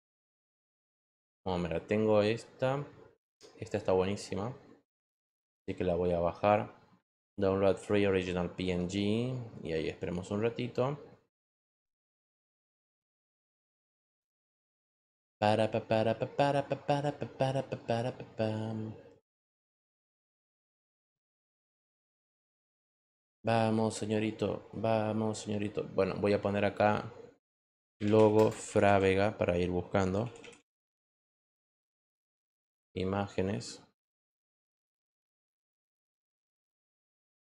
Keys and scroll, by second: 27.4-31.0 typing.